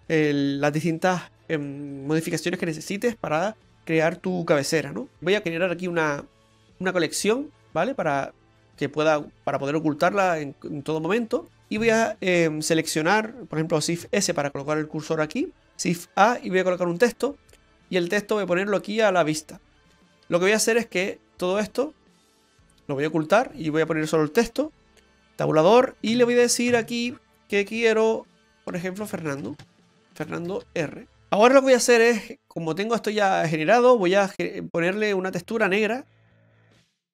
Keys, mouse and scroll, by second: 5.6 right click, 7.6 right click, 7.7 click, 9.4 click, 10.9 click, 11.4 click, 13.2 right click, 14.0 shift+s, 15.8 shift+a, 18.6 click, 22.8 click, 25.1 Tab, 26.1-26.4 BackSpace, 26.7 BackSpace, 28.7-30.6 typing, 34.1 click, 35.0 click, 36.1 click.